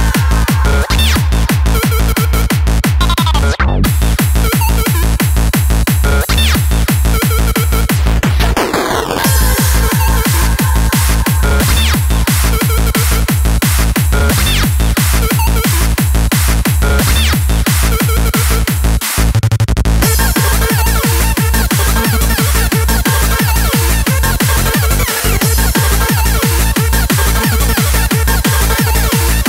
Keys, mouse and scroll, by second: 25.2 click.